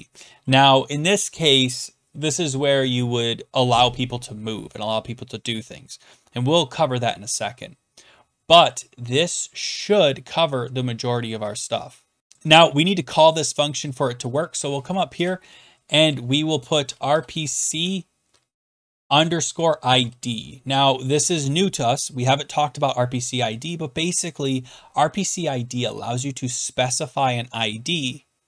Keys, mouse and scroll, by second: 6.8-11.1 scroll down 1, 11.1-11.8 scroll down 1, 11.8 scroll down 1, 12.2-13.2 drag, 14.6 click, 15.2 Return, 16.6-17.8 typing, 18.8-19.9 typing, 21.0-21.8 typing.